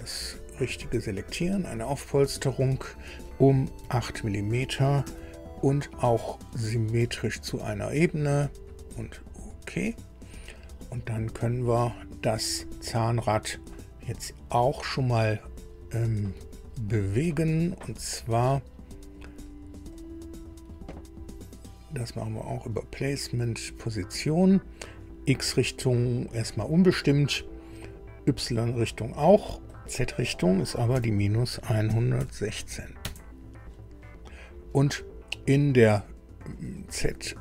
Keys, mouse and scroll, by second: 1.2 click, 3.8 KP_8, 5.0 Tab, 7.4 click, 9.1 click, 17.0 click, 19.9 click, 24.8 click, 29.6 click, 30.9 KP_Subtract, 31.6 KP_1, 31.8 KP_1, 32.2 KP_6, 33.0 KP_Enter.